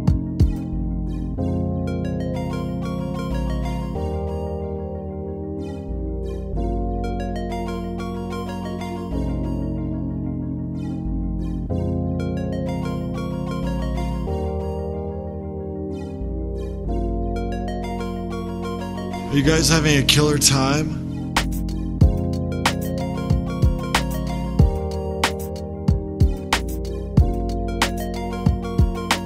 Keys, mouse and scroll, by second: 18.8 click, 20.7 click, 25.8 click.